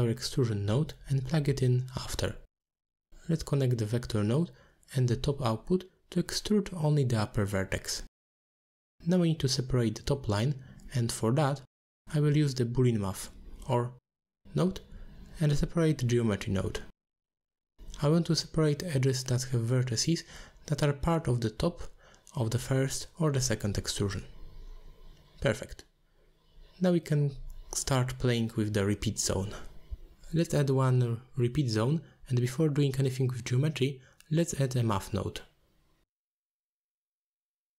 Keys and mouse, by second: 0.6 click, 0.9 shift+d, 2.2 click, 3.5 click, 4.9 middle click, 6.7-7.6 drag, 8.3-9.1 drag, 10.2-13.1 shift+drag, 14.1 middle click, 16.1 middle click, 16.7 middle drag, 20.0-21.8 drag, 22.1 click, 22.9-26.2 drag, 26.8 click, 28.3-28.9 drag, 29.4 click, 30.8 alt+shift+click, 31.2 alt+shift+click, 31.5 alt+shift+click, 31.9 alt+shift+click, 32.2 alt+shift+click, 32.7 middle click, 33.4 shift+a, 37.1 click, 37.5 click.